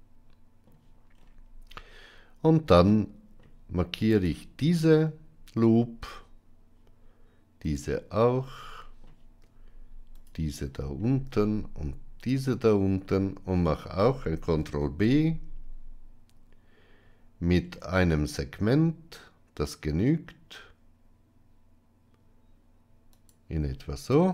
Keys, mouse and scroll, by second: 2.8 middle click, 4.0 alt+click, 7.6 alt+shift+click, 8.4 middle click, 10.1 alt+shift+click, 12.2 alt+shift+click, 13.0 middle click, 14.5 ctrl+b.